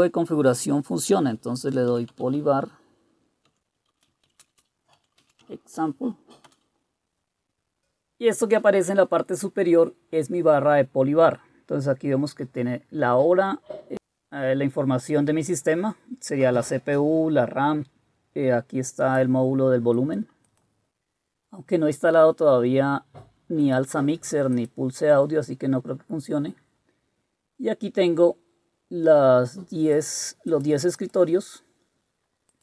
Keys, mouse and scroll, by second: 1.4-5.7 typing, 6.5 Return.